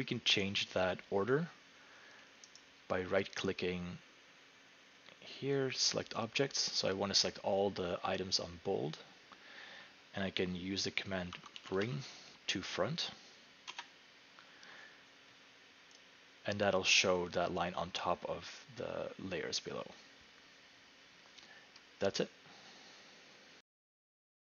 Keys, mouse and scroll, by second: 2.6 right click, 6.6-9.3 drag, 11.1-12.3 typing, 13.7 Return, 16.0 click.